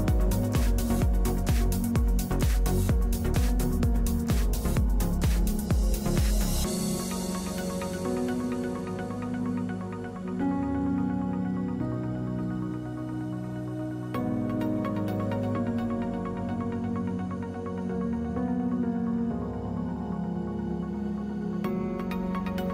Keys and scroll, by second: 0.7 x, 10.2 F3, 11.5 x.